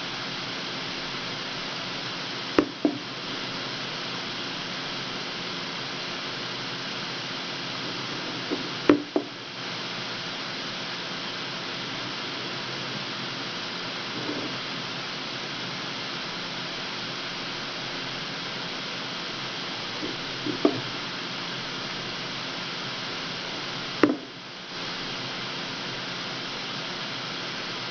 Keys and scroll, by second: 10.2 w, 15.7 w, 24.1 w.